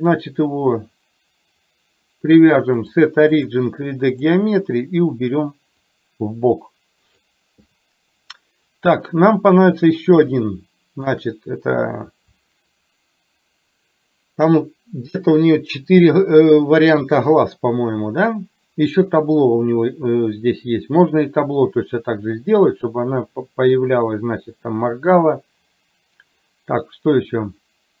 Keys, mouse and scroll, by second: 0.0 click, 2.8-4.3 drag, 6.0-7.3 drag, 10.4 shift+middle click.